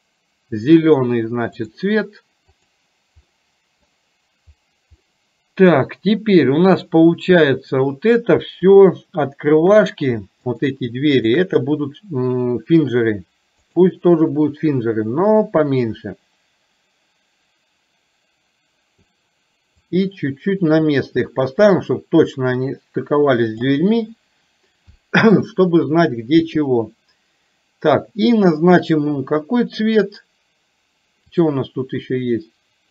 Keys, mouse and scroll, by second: 3.4 middle click, 5.1 middle click, 6.7 click, 8.9 shift+click, 10.5 shift+click, 13.9 click, 15.5-25.6 drag, 25.6-26.7 middle drag, 31.5 click.